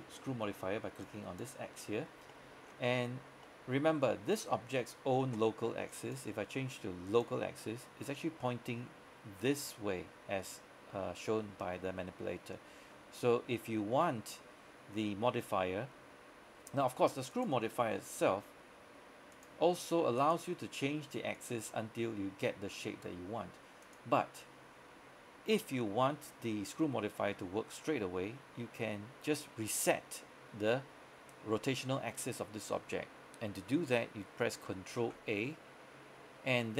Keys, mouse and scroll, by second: 2.4 middle click, 3.0-3.5 scroll up 1, 3.5 middle click, 6.0 click, 23.0 click, 35.1 ctrl+a.